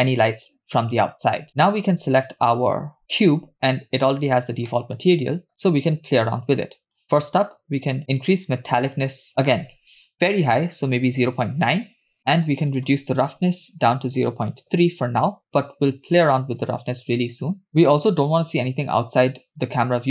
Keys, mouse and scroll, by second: 1.6 drag, 3.6-4.2 scroll down 2, 4.7 middle click, 5.7 click, 7.0-8.0 drag, 8.4-11.4 drag, 12.2-12.6 scroll up 5, 12.6-14.7 drag, 17.3 scroll down 2, 17.7 scroll up 2, 19.7 click.